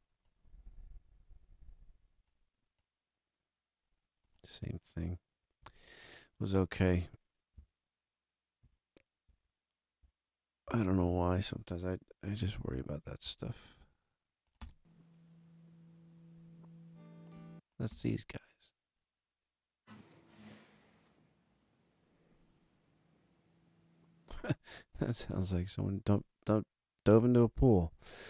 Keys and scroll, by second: 5.5 a, 8.6 super+-, 9.2 super+=, 12.4 alt+a, 14.5 space, 17.3 space, 24.2 space, 27.8 a.